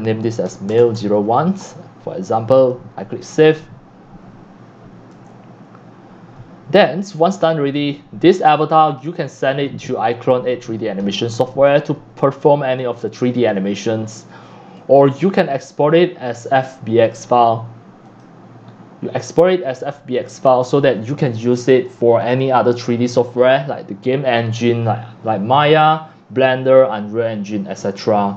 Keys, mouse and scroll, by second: 0.2-1.6 typing, 2.7-7.3 drag, 7.5 drag, 7.8 click, 8.5-9.3 scroll, 10.8 click, 11.0-11.5 scroll, 13.8 click, 14.1 scroll down 2, 15.2 click, 16.0 click, 17.1 click, 17.5-18.1 drag.